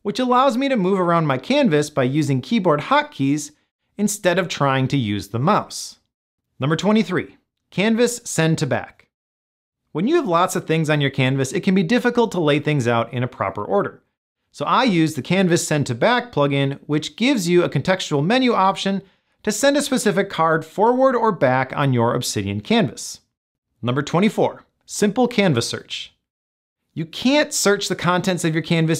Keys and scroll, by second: 0.2 Down, 1.4 Right, 3.6 Down, 4.8 Up.